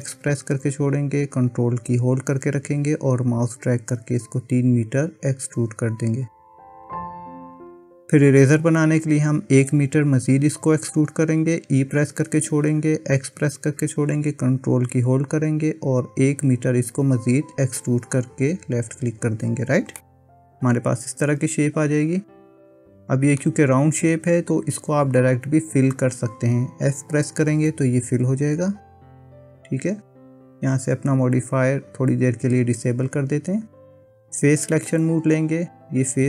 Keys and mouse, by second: 12.5 e, 20.0-21.3 middle drag, 21.4-23.4 middle drag, 28.9 f, 31.2 click, 34.5 click, 36.1 click.